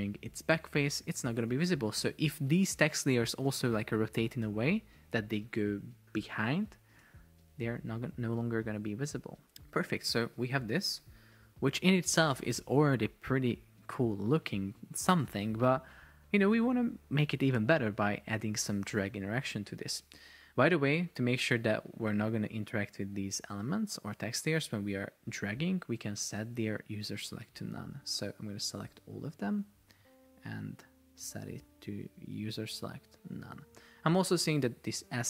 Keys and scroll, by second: 1.1 shift+Down, 4.8 shift+Down, 7.4 shift+Down, 9.1 shift+Up, 9.6 shift+Down, 11.0 super+p, 27.3 Escape.